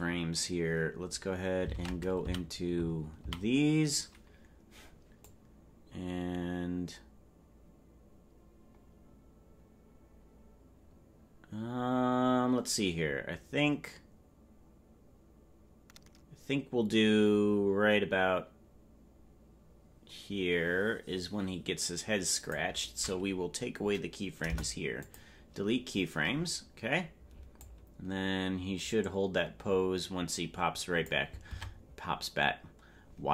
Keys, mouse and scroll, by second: 5.3 ctrl+Tab, 5.3-22.6 drag, 5.3 a, 27.6 Delete, 27.6-31.2 drag, 31.5 ctrl+Tab.